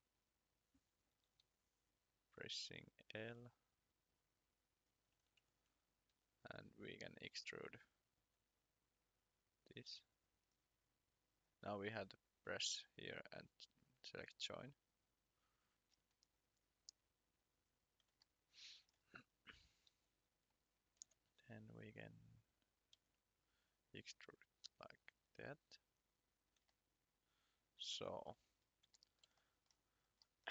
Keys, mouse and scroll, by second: 1.3 click, 3.1 click, 5.3 Escape, 7.2 click, 8.2 ctrl+click, 9.2 click, 13.6 click, 15.9 scroll down 1, 17.5 click, 18.2 shift+middle click, 19.9 r, 20.6 r, 20.9 c, 21.7 click, 22.9 e, 24.1 click, 26.7 shift+middle click, 28.5 scroll down 1, 29.7-30.2 scroll up 1, 30.2 middle click.